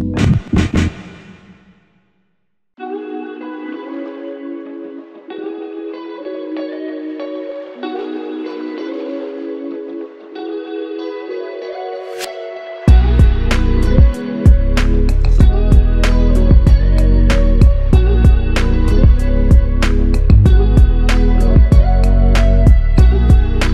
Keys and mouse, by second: 3.1 alt+click, 8.8 alt+click, 13.7 alt+click, 16.0 alt+click, 19.4 alt+click, 23.2 alt+click.